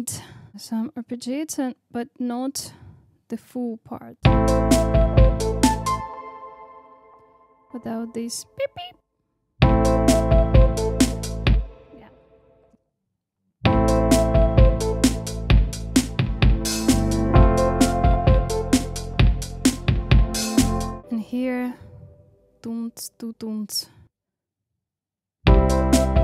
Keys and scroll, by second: 4.2 space, 5.9 space, 9.5 space, 11.4 space, 13.5 space, 24.6 super+c, 25.1 super+v, 25.4 space.